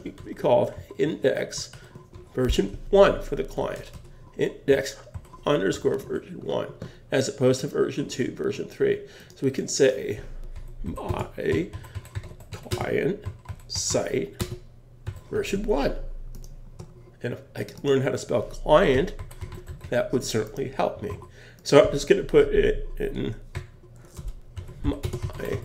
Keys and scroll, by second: 1.7 shift+), 5.1 shift+_, 21.1 super+s.